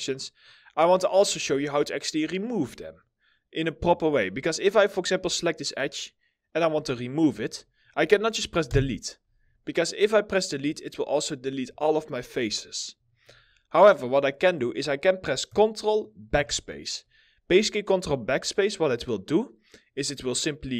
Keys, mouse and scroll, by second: 0.2 scroll up 1, 0.6 alt+middle click, 4.6 double click, 6.7 alt+middle click, 8.3 Delete, 9.4 alt+middle click, 11.5 alt+middle click, 12.6 alt+middle click, 12.9 ctrl+z, 13.4 middle click, 16.0 ctrl+BackSpace, 19.9 double click, 20.3 middle click.